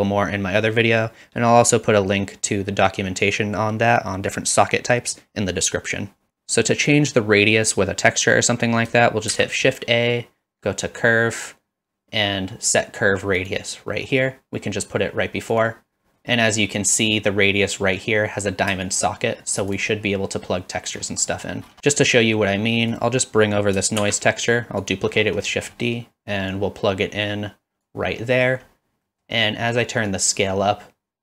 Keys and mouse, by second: 9.3 shift+a, 18.9 shift+click, 21.4 middle click, 24.0 shift+d, 24.9 click, 25.5 middle click, 26.6-27.9 drag, 28.4 middle click, 29.1 middle click, 30.2-31.2 drag.